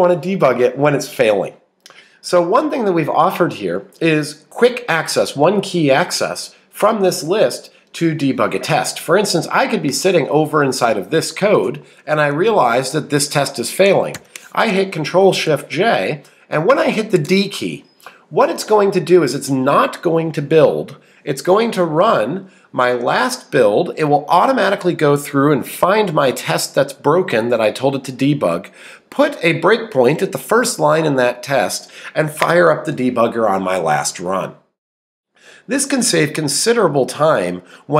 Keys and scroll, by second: 17.2 d.